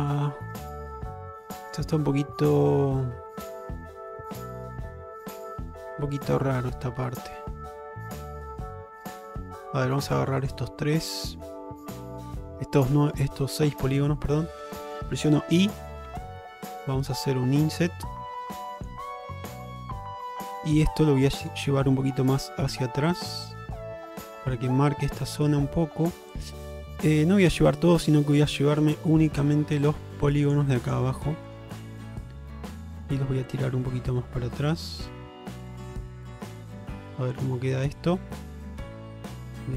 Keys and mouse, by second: 0.8 middle click, 1.6 shift+middle click, 2.2-9.6 middle drag, 10.5 shift+click, 11.0 middle click, 14.1 middle click, 14.7 middle click, 16.2 i, 19.2-20.2 middle drag, 20.4 shift+middle click, 22.0 alt+middle click, 23.5-26.4 drag, 26.8-28.3 middle drag, 28.9 middle click, 31.5 shift+click, 31.9-32.9 middle drag, 33.6-36.6 drag, 37.4 click, 37.9 Tab, 38.3-39.0 middle drag, 39.5 shift+middle click.